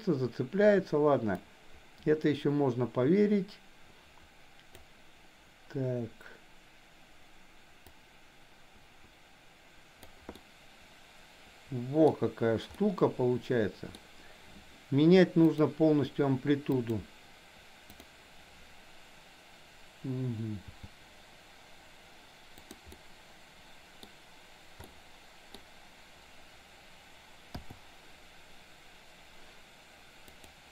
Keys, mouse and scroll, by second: 1.4-4.9 drag, 8.0-10.1 drag, 10.4-12.1 middle drag, 12.7-13.9 middle drag, 15.5 drag, 16.7 click, 17.9 drag, 20.7 g, 22.9-24.2 middle drag, 24.9-25.6 middle drag, 30.4 click.